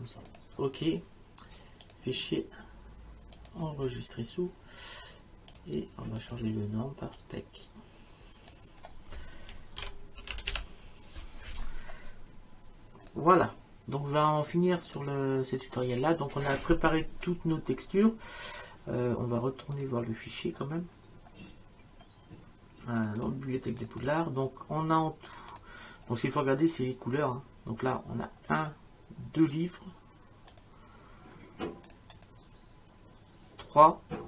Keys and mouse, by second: 0.3 click, 1.9 click, 3.4 click, 5.5 click, 9.6-11.0 typing, 13.1 click, 14.9 click, 19.8 click, 23.0 click, 25.3 click, 30.5 click, 31.9 click.